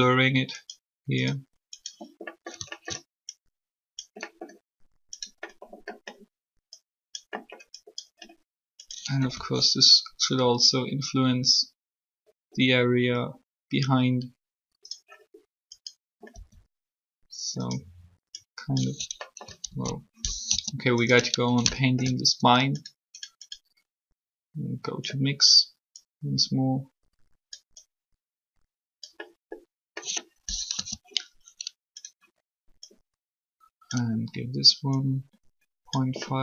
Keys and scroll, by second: 9.3 r, 16.3 r, 19.7 ctrl+z, 20.4 3, 30.7 3.